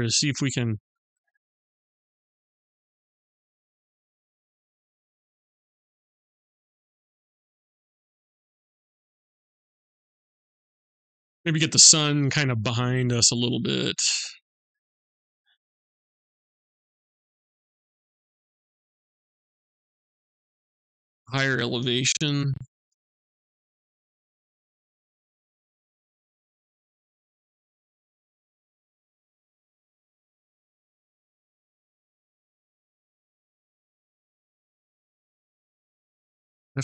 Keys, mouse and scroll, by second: 3.5 click, 13.6 click, 20.2 click, 28.5 click.